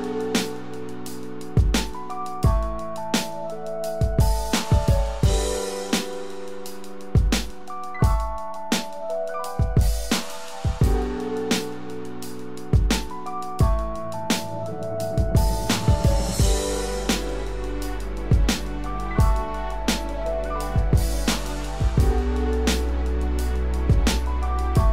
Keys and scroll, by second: 12.6 ctrl+z, 13.6 ctrl+alt+z, 14.6 ctrl+=, 20.4 ctrl+z.